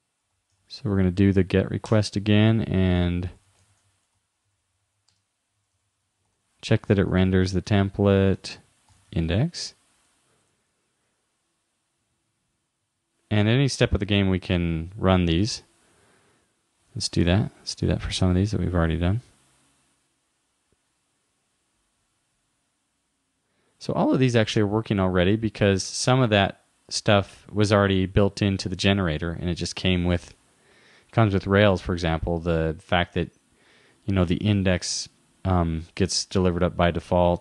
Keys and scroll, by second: 0.6 shift+-, 6.3 shift+-, 8.4 shift+9, 12.8 super+s, 16.9 super+r.